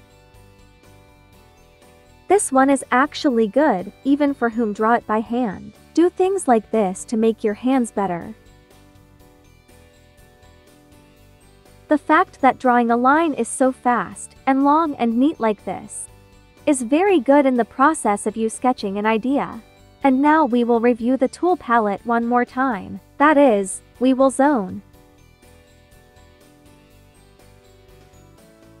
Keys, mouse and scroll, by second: 5.5 space, 5.6 click, 6.6 2, 6.8 2, 9.4 1, 10.3 space, 10.6 click, 10.8 space, 19.9 space, 24.3 space, 24.4-28.8 drag.